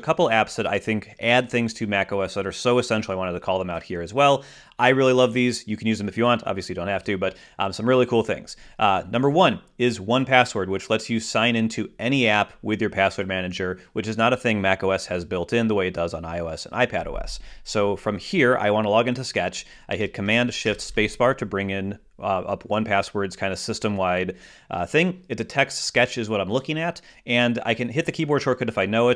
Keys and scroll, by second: 21.3 shift+super+space.